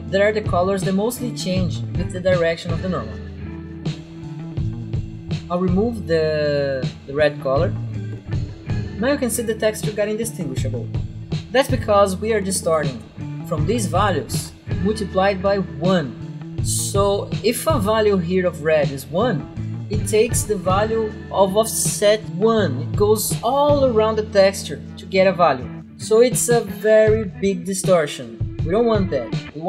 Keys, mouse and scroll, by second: 3.8 click, 4.0 click, 5.2 right click, 6.9 click, 8.0 Delete, 8.5 click, 8.6 click, 12.9 right click, 14.1 click.